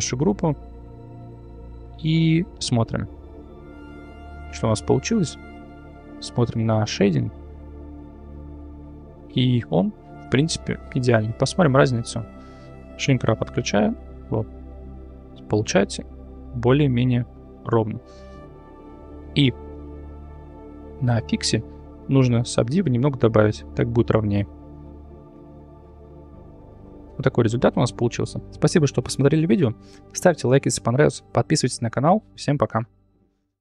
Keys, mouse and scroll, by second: 2.3 click, 2.7 click, 3.4 Tab, 3.7-4.4 middle drag, 4.6 `, 5.1 `, 6.5-8.4 drag, 10.1 shift+middle click, 12.9 click, 14.1 click, 14.5 click, 14.9 click, 15.4 click, 15.8 click, 18.8 shift+middle click, 21.0 click, 22.3 click, 23.5 click, 24.0 click, 25.8 click.